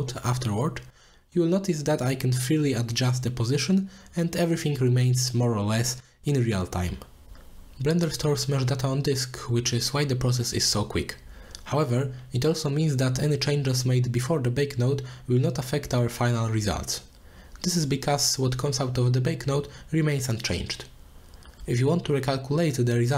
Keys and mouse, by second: 2.6 click, 3.0 middle click, 4.1-5.3 middle drag, 5.3 click, 6.0-7.0 drag, 7.5 click, 8.7 middle click, 9.0 middle click, 9.9-11.4 drag, 11.7 click, 12.5-12.9 middle drag, 13.4-14.1 drag, 15.0 middle click, 15.6 click, 16.2 middle click, 16.8 click, 17.4 click, 17.8 middle click, 19.0 click, 19.4 click, 20.1 click, 20.6 click, 21.5 click, 22.6 click.